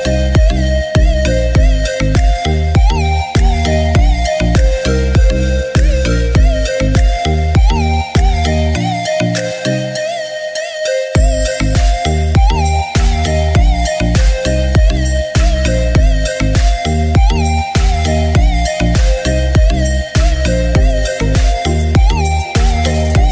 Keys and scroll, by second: 0.0-3.0 typing, 11.4 ctrl+shift+a.